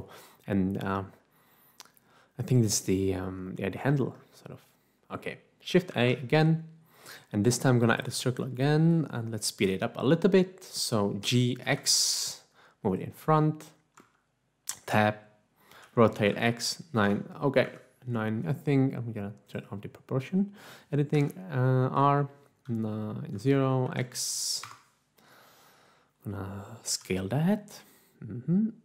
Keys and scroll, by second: 5.9 a, 11.1 g, 11.7 x, 14.2 Tab, 15.7-17.0 typing, 17.8 Escape, 19.1 typing, 21.1 typing, 22.3-23.9 typing, 24.6 Return, 26.9 s.